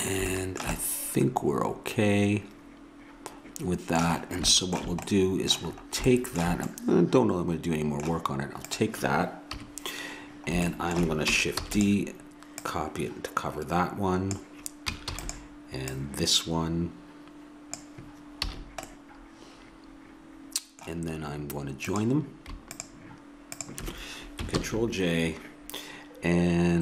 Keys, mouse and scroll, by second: 2.7 middle click, 4.2-5.8 middle drag, 8.7 click, 9.5 KP_3, 11.6 shift+d, 15.2 shift+d, 15.9-17.7 drag, 18.6 a, 21.9-24.6 drag, 24.6 ctrl+j.